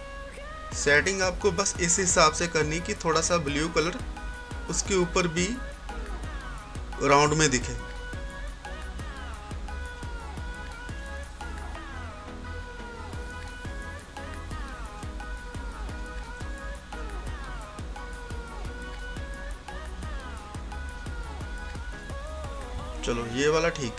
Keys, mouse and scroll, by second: 11.0-20.2 drag, 20.3-23.9 drag.